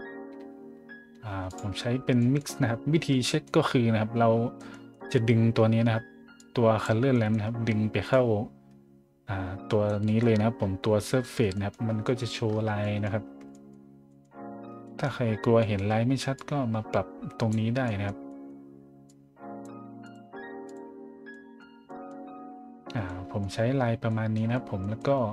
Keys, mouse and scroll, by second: 1.5 click, 2.2 scroll up 1, 3.0-3.7 scroll up 3, 3.9 scroll down 1, 4.6-5.3 scroll up 3, 6.4 click, 7.1 middle click, 8.1-9.8 drag, 10.0 middle click, 10.3 scroll up 1, 10.5 middle click, 11.5 middle click, 11.9 middle drag, 12.4 middle drag, 12.8 middle drag, 13.3 a, 13.5 middle drag, 14.1 middle drag, 14.4 middle click, 14.8 middle click, 15.2 middle click, 15.6 middle click, 16.3-17.5 drag, 17.8 middle click, 18.3 middle click, 19.0 click, 20.0 click, 20.6 click, 21.3 middle drag, 21.9 middle drag, 23.0-23.4 middle drag, 24.1 middle drag, 24.5 middle drag, 25.0 middle click.